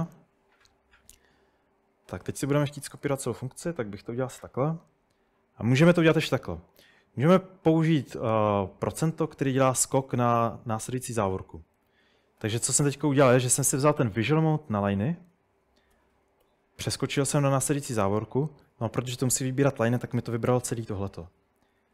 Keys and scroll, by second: 3.2 v, 9.4-11.8 typing, 12.4 Escape, 12.6 Escape, 12.8 Escape, 13.3-14.1 typing, 16.4-17.1 typing.